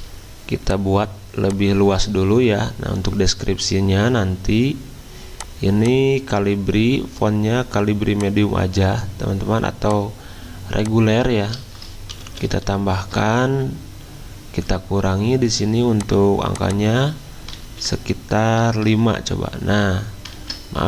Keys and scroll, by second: 12.1 alt+Down, 12.3 alt+Down, 12.5 alt+Down, 12.7 alt+Down, 17.6 ctrl+a, 18.6 5, 18.9 Return, 20.3 ctrl+z.